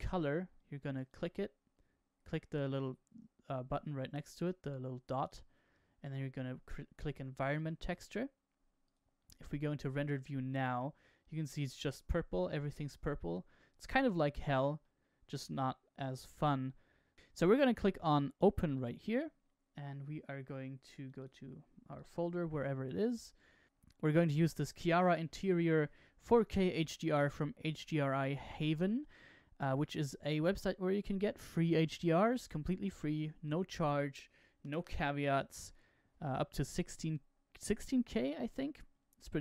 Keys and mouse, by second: 1.0 click, 5.2-7.6 drag, 10.3-12.3 middle drag, 14.7-16.1 middle drag, 18.7 click.